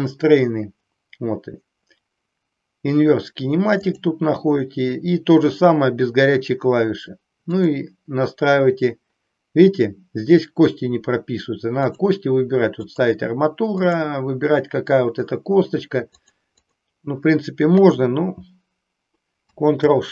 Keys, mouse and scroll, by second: 7.5 click, 11.8-13.0 drag, 13.8-16.2 drag.